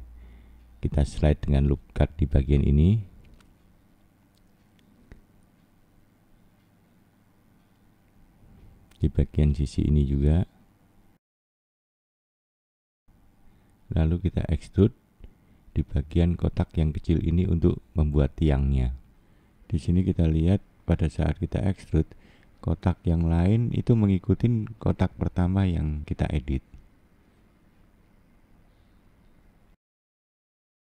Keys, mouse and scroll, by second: 2.2 middle click, 4.4 click, 9.9 middle click, 11.1 click, 16.2 click, 17.2 click, 18.2 click, 18.8 scroll up 1, 20.4 e, 26.1 scroll down 4, 26.7 middle click, 29.0 click, 29.3-30.1 scroll down 1, 30.1 scroll up 1.